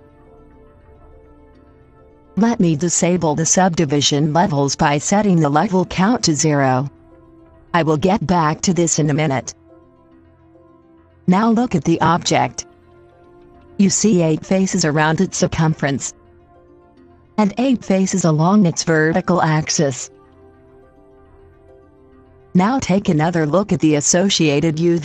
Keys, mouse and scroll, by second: 6.0-12.8 drag.